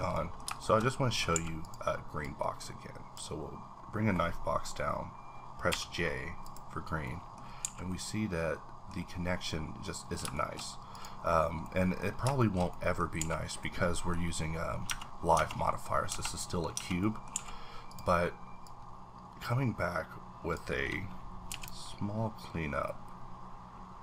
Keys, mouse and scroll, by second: 0.8-1.3 shift+scroll up 1, 1.3 a, 1.6 click, 2.5-3.2 drag, 3.7-5.6 scroll down 1, 5.6 scroll down 1, 5.7 j, 6.4 click, 7.0 middle click, 7.4 scroll up 1, 7.6 a, 7.9-9.4 middle drag, 8.9-10.0 scroll up 4, 10.0 scroll down 1, 10.4 shift+middle click, 10.6 scroll down 1, 10.9 click, 11.3 scroll down 1, 11.6 middle click, 12.0 scroll up 1, 12.4 shift+middle click, 13.2 a, 13.6-15.3 middle drag, 14.9 Tab, 15.8-16.1 scroll down 3, 16.1 Tab, 16.3 middle click, 16.7 Tab, 17.3 a, 17.5-17.9 scroll up 2, 17.9 click, 18.9-20.8 drag, 21.5 z.